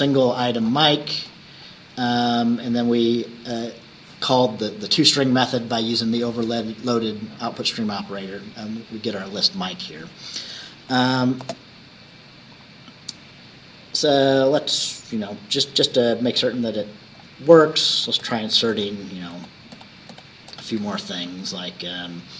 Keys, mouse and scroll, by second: 0.2-1.0 scroll down 1, 1.4-1.8 scroll up 1, 11.0 click, 11.5 space, 16.4-17.4 drag, 18.0 ctrl+c, 18.3 ctrl+v.